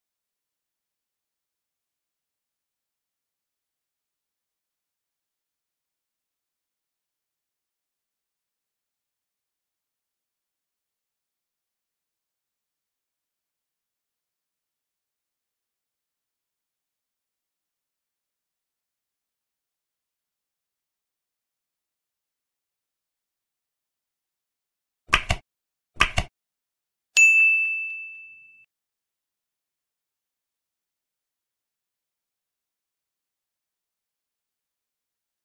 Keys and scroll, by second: 0.0-1.6 typing, 2.8-4.4 typing, 4.6 ctrl+Left, 4.9 Right, 5.6 space, 6.3 space, 7.5 space, 8.1 End, 12.6 Tab, 13.5 Tab, 15.6 Tab, 18.1 Delete, 18.3 ctrl+s, 19.0 Down, 19.4 End, 21.1 End, 21.2 ctrl+Delete, 21.7 ctrl+s, 22.3 ctrl+Tab, 22.9 ctrl+s, 29.1 Delete, 29.4 Down, 29.6 ctrl+Left, 30.4 ctrl+shift+Left, 31.1 F7, 31.4 ctrl+Right, 31.8 ctrl+shift+Left, 32.3 Delete, 32.6 Left, 33.9 Down, 34.0 ctrl+Left, 34.6 ctrl+shift+Left.